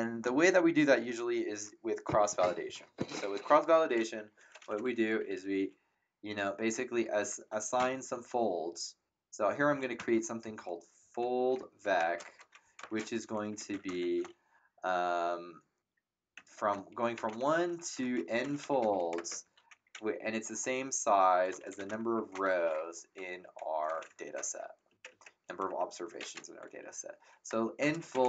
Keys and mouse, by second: 4.9-5.8 typing, 7.7 l, 9.7-14.5 typing, 16.3 shift+1, 17.7-20.2 typing, 21.3-23.1 typing, 24.2 Up, 24.3 Return, 24.9 Down, 25.4 Up, 27.5-28.2 typing.